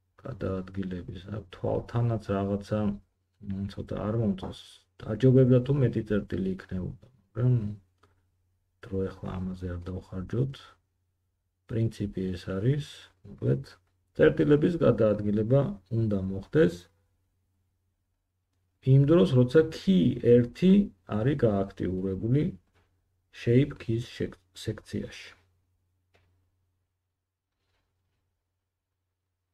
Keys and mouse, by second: 3.3 g, 5.6 g, 10.0 middle click, 10.1-13.2 drag, 10.2 g, 11.9 g, 14.7-22.4 drag, 17.3 g, 22.4 middle click, 22.5-29.5 drag, 23.2 g, 28.5 g.